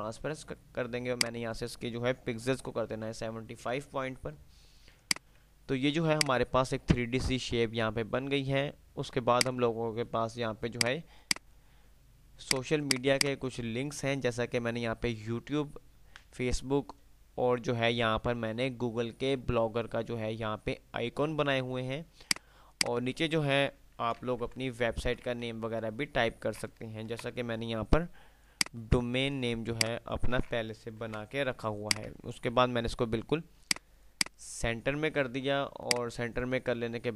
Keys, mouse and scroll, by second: 5.1 click, 5.5 F3, 6.5 click, 8.3 F3, 9.5 F2, 9.5 click, 9.8 F2, 11.0 click, 11.1 F2, 11.1 click, 15.8 typing, 22.5-23.6 drag, 24.1 ctrl+g, 24.1 Delete, 25.6 ctrl+z, 25.6 F3, 27.3 shift+Page_Up, 28.8-29.6 drag, 29.6 F2, 30.0-30.5 F2, 31.0 Page_Up, 32.1 shift+click, 32.6 c, 32.8 F3, 34.3 F2, 34.3 click, 34.6 F2, 36.0 click.